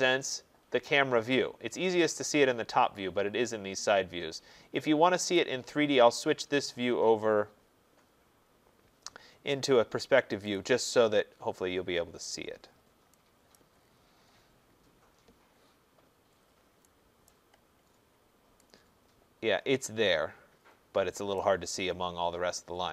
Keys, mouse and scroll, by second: 0.6-3.2 scroll, 3.3 middle click, 4.3 scroll, 5.4 click, 10.5 click, 11.3-13.5 scroll, 13.5 right click, 13.8-14.6 scroll, 14.7 middle click, 14.9 middle click, 15.1 middle click, 15.5 middle click, 15.6 middle click, 16.4 middle click, 17.3 right click, 17.6 middle click, 17.7 middle click, 17.8 middle click, 18.2 middle click, 21.4 right click, 21.6 middle click, 21.7 middle click.